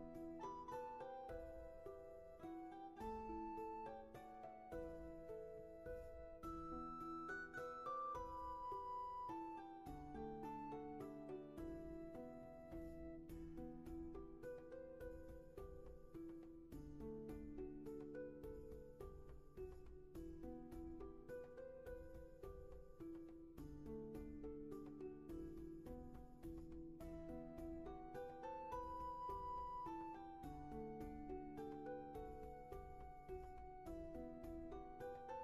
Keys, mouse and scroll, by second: 1.6 ctrl+z, 7.1 ctrl+z, 16.3 ctrl+z, 22.6 ctrl+z, 24.6 ctrl+z, 33.1 ctrl+z.